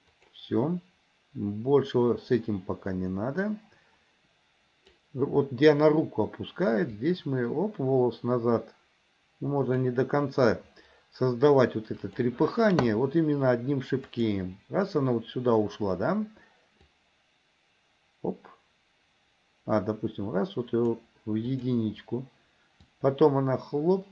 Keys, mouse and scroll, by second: 0.4 click, 2.6-5.3 drag, 7.0-10.1 drag, 12.3 click, 14.3 click, 16.9-21.0 drag, 21.7 click, 23.1-24.1 drag.